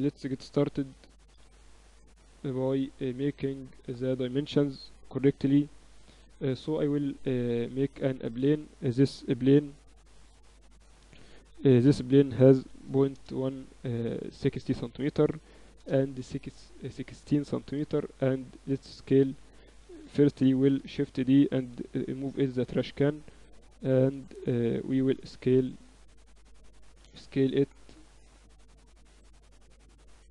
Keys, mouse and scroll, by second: 1.6-3.7 typing, 4.7 middle click, 6.7 a, 8.0-9.9 drag, 8.3 shift+a, 10.3 n, 11.4-13.5 drag, 15.3-18.6 drag, 18.6 n, 19.2-21.1 right drag, 19.9 s, 21.3 shift+d, 22.7 m, 24.6-26.6 right drag, 25.8 s, 26.6 middle click, 27.7 s, 28.8-30.3 right drag, 29.7 h.